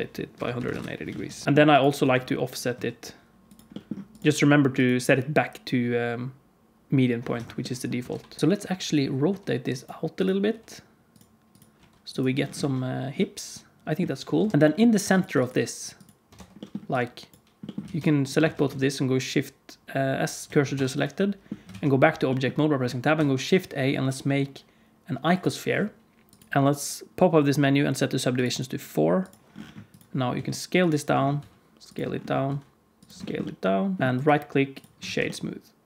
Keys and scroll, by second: 1.1 alt+a, 1.4 q, 1.9 r, 7.9 r, 9.2 r, 10.4 r, 12.5 alt+a, 14.3 KP_1, 16.3 Tab, 17.8 alt+z, 18.3 alt+z, 18.7 shift+s, 20.7 Tab, 21.6 alt+a, 23.1 shift+a, 30.3 s, 31.3 s, 32.4 s, 34.0 KP_Decimal, 35.0 alt+a.